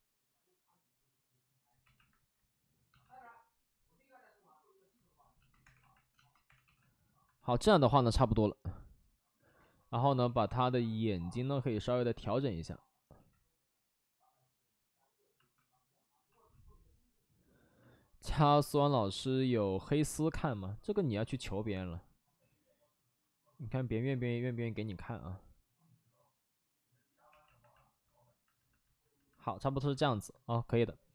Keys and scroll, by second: 1.8 2, 5.6 2, 6.4 2, 6.6 2, 10.1 w, 15.3 x, 15.5 alt+f, 16.1 alt+f, 27.2 2.